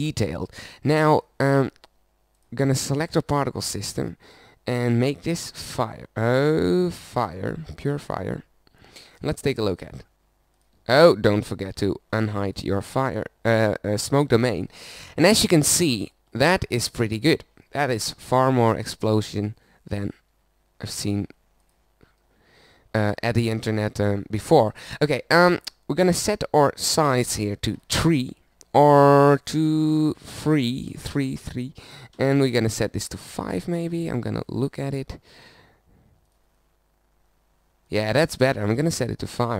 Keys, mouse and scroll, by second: 7.6-9.9 middle drag, 11.7 alt+h, 22.0 middle click, 23.3-32.5 middle drag, 32.6 middle click.